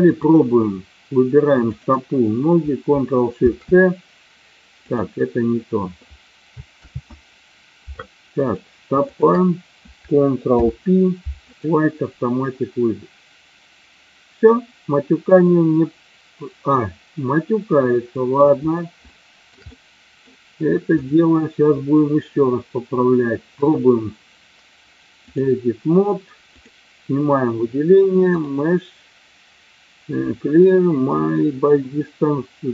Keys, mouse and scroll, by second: 1.8 shift+click, 3.4 ctrl+shift+c, 4.8 click, 6.9 ctrl+z, 8.2-8.6 drag, 9.0 shift+click, 10.5 ctrl+p, 17.8-18.2 middle drag, 19.0-19.4 shift+middle drag, 19.6-20.1 middle drag, 21.0 click, 23.5-25.4 drag, 26.5 click, 28.4 click.